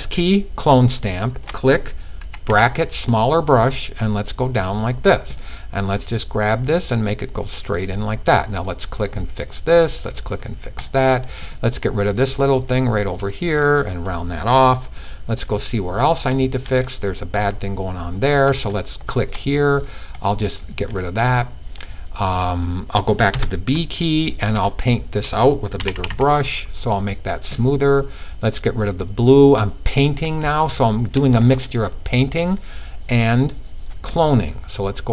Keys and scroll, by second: 1.7 typing, 22.8 b, 25.2 typing.